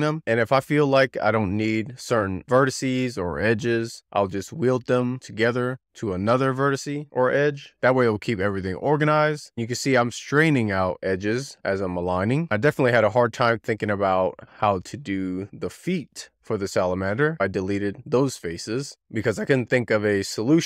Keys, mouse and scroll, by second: 0.9 click, 3.0 click, 3.1 click, 3.6 scroll down 3, 3.9 shift+middle click, 4.0 scroll up 2, 4.3 click, 4.3 click, 6.2 z, 6.3 scroll down 1, 6.4 click, 7.4 shift+middle click, 7.8 click, 9.9 drag, 12.0 shift+middle click, 12.3 scroll down 1, 12.4 scroll up 1, 12.6 x, 12.7 shift+click, 13.0 x, 13.0 shift+middle click, 13.6 z, 13.7 scroll down 4, 13.9 shift+middle click, 14.2 ctrl+r, 14.2 scroll up 3, 14.4-14.7 click, 14.8 click, 15.1 shift+middle drag, 15.3 ctrl+r, 15.6 scroll down 2, 16.1 alt+q, 16.2 shift+middle click, 16.7 click, 16.9 shift+middle click, 17.1 scroll up 2, 17.3 click, 17.4 click, 18.3 click, 18.9 x, 19.3 shift+middle click, 19.4 scroll down 3, 19.5-20.6 scroll up 3, 19.7 click, 19.8 1.